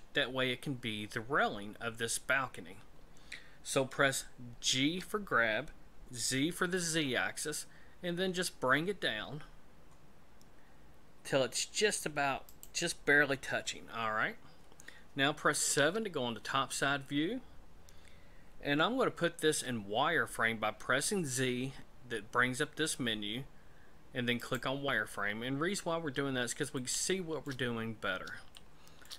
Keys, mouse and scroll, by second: 4.7 g, 15.7 KP_7, 19.4 z, 25.8-26.6 scroll up 4, 26.8 shift+middle click, 27.8 scroll up 2, 28.6 shift+middle click.